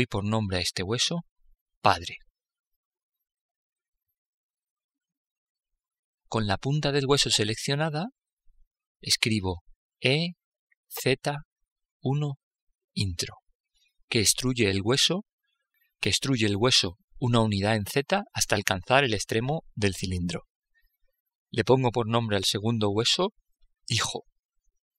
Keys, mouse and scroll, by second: 9.3 e, 22.3-24.2 drag.